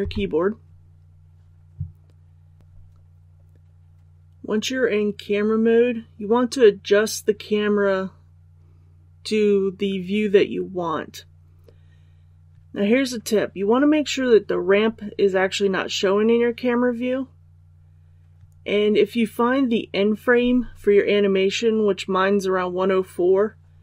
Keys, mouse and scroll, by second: 2.6 click.